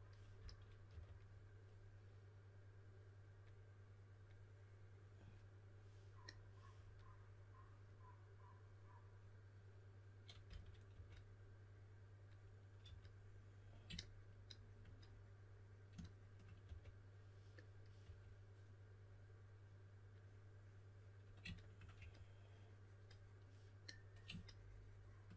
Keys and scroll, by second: 0.1-1.3 typing, 10.4-10.8 typing, 12.8 typing, 16.6 4, 18.0 typing, 21.9 3.